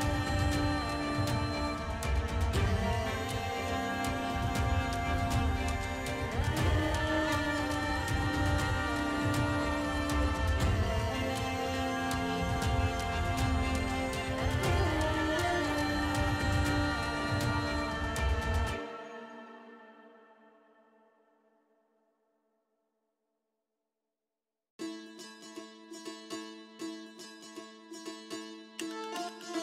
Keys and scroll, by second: 4.1 space, 4.3 space, 6.7 space, 12.8 ].